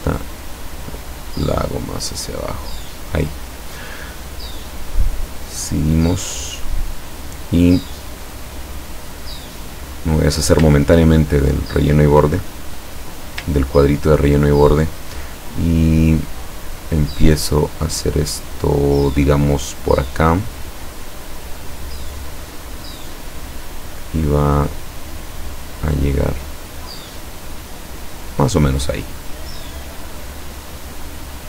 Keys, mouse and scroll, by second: 0.4-3.0 drag, 4.8 click, 8.3-9.3 middle drag, 10.3 click, 10.9 ctrl+scroll down 2, 11.8 ctrl+middle click, 13.6 ctrl+scroll down 2, 21.4 click, 26.2 click, 28.1 click.